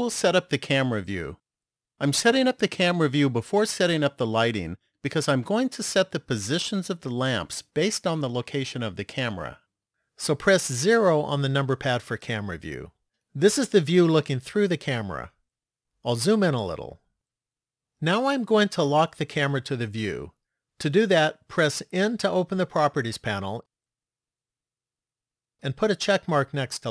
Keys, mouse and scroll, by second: 10.9 KP_0, 15.8-17.7 scroll up 3, 22.0 n, 25.0 click.